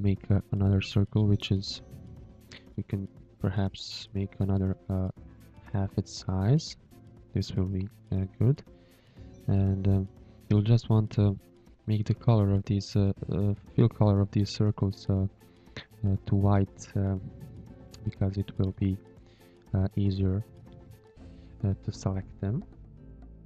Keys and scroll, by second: 1.3 v, 3.1 ctrl+z, 5.9 ctrl+z, 6.9 v, 10.0 v, 12.8 v, 20.1 v, 21.9 v, 23.0 shift+a.